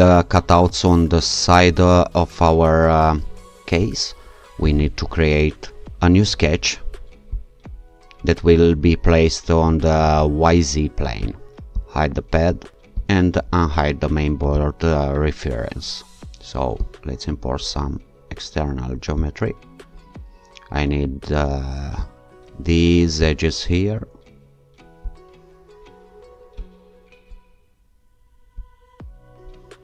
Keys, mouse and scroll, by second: 4.6 click, 7.3 click, 11.2 click, 11.8 click, 13.0 click, 14.6 click, 16.1 click, 16.8 click, 19.2 click, 22.0 click, 23.2 click, 25.1 click, 26.6 click, 28.6 click.